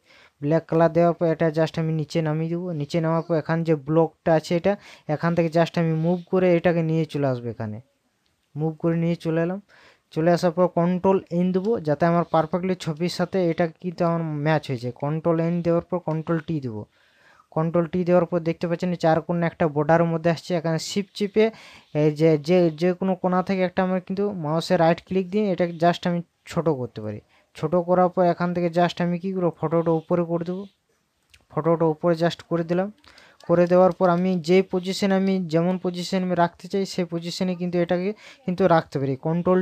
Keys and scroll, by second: 12.9 ctrl+KP_Subtract, 17.9 t, 34.7 ctrl+KP_Add.